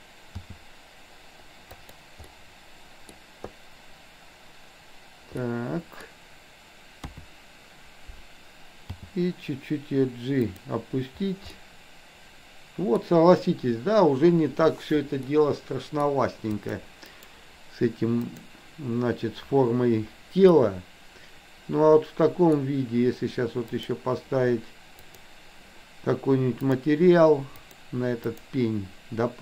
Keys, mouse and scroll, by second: 0.4 g, 2.4-3.2 middle drag, 5.4-6.1 middle drag, 7.1 KP_3, 9.0 g, 11.5-13.1 middle drag, 15.4 middle click, 16.7 click, 17.1-18.5 right drag, 20.6-22.6 middle drag, 23.6 click, 25.1 click, 26.7 click, 27.6 click, 28.2-29.0 drag.